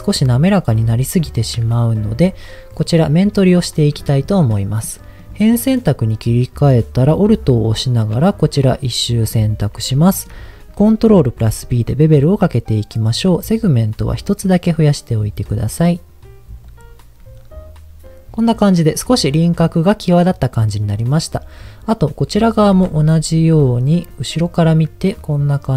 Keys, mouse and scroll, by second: 1.1 middle click, 2.1 Tab, 5.2 click, 7.7 alt+click, 8.7 middle click, 9.5-9.9 scroll up 2, 10.0 shift+middle click, 11.3 ctrl+b, 12.8-13.1 scroll down 1, 13.1-13.4 scroll up 1, 16.7 click, 22.8 Tab, 23.3 middle click, 24.4 alt+click, 25.0 middle click.